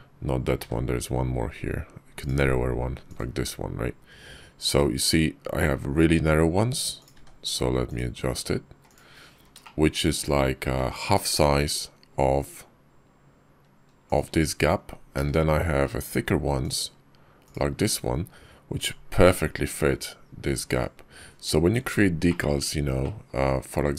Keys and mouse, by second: 0.5 d, 4.5 g, 7.8 d, 9.5 shift+click, 10.6 g, 17.4 d, 18.6 g, 22.1 shift+click, 22.9-23.2 middle drag, 23.4 KP_5.